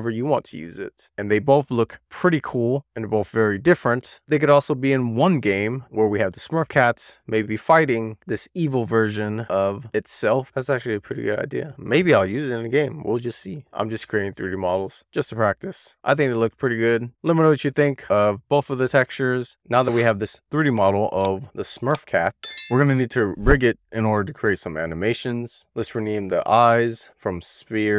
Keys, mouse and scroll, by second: 0.2-1.8 scroll down 1, 2.8 click, 4.8 middle click, 5.5-6.6 shift+middle drag, 7.1 click, 7.6 click, 7.9 Tab, 8.4 shift+middle click, 8.9 click, 9.4 middle drag, 9.6 scroll up 1, 9.8-14.2 middle drag, 14.3-15.9 scroll down 1, 16.1 shift+middle click, 17.8 click, 19.1 middle click, 25.8 click, 26.6-27.9 drag.